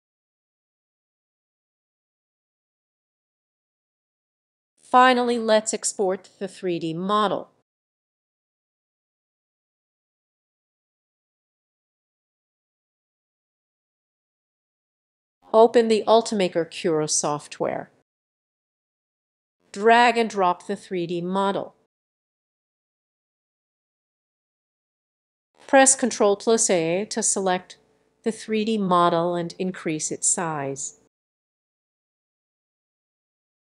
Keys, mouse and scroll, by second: 2.3 click, 3.4-4.6 drag, 5.0-7.1 drag, 7.9-10.0 drag, 10.1 click, 10.5-11.7 typing, 12.6 click, 15.1 click, 15.7 click, 18.5 click, 23.9-24.6 scroll up 4, 26.3 middle click, 26.5 ctrl+a, 28.7 click, 30.2 click, 32.4-33.7 drag.